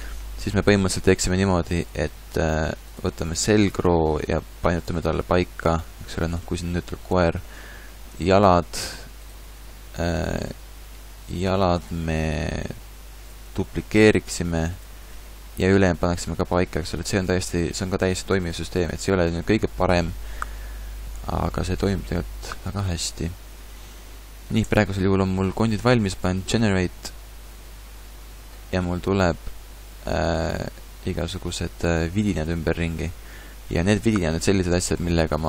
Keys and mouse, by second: 1.2 Tab, 4.1 r, 5.0 g, 8.1 a, 10.0 a, 10.6 b, 12.8 g, 13.6 shift+d, 17.2 ctrl+z, 17.4-18.3 ctrl+z, 18.6 ctrl+z, 19.0 ctrl+z, 22.5-24.6 middle drag, 22.9 a, 24.6 Tab, 28.2 click, 28.8-31.2 middle drag, 29.3 a.